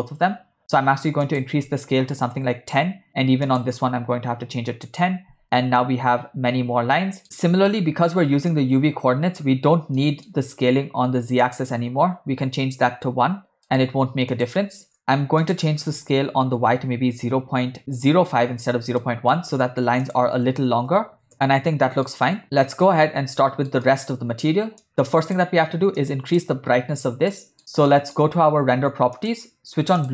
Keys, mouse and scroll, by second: 1.3-2.5 drag, 3.5-4.7 drag, 5.4 space, 6.6 space, 7.0 middle click, 8.6 click, 10.1 middle click, 11.6-12.8 drag, 13.7 middle click, 14.4 click, 15.0 middle click, 15.6-17.8 drag, 19.1 shift+middle click, 20.1-21.3 drag, 21.1 0, 21.3 space, 21.8 middle click, 22.2 space, 22.5 middle click, 23.4 ctrl+middle click, 23.8 middle click, 24.9 click, 26.0 click, 27.3 middle click, 27.9 ctrl+middle click, 29.3 click.